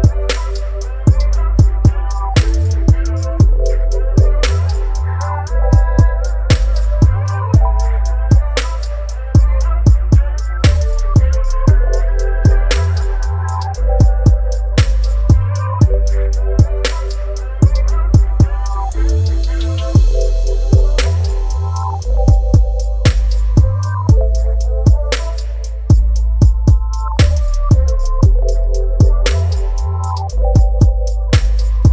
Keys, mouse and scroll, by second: 2.8-5.1 shift+drag, 7.3 ctrl+j, 8.5 ctrl+t, 10.9-22.4 shift+drag, 25.2 shift+click, 29.3 click, 31.8 right click.